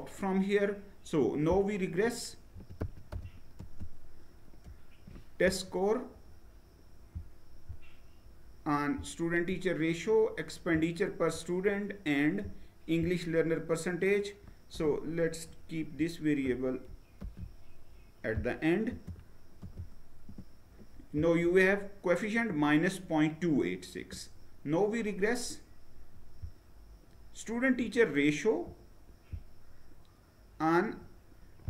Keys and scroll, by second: 2.0-3.2 typing, 16.7 ctrl+x, 18.5 space, 19.2 ctrl+v, 19.8 Return.